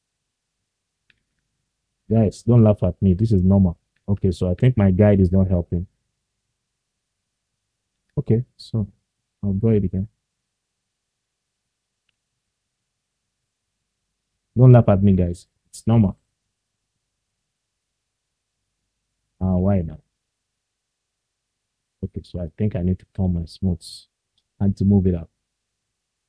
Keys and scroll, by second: 13.9 ctrl+z, 18.5 ctrl+z, 21.3 ctrl+z.